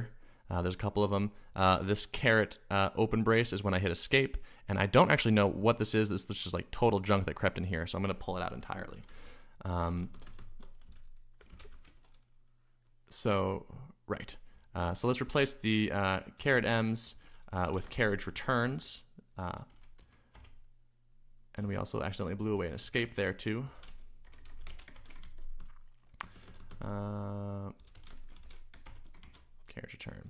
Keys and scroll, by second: 8.6 Escape, 8.7-12.2 typing, 14.3-20.5 typing, 21.5-30.2 typing.